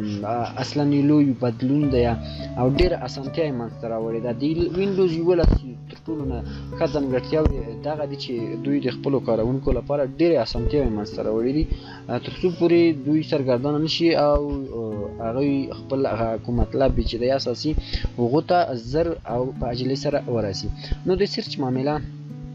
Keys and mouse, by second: 21.8 shift+click.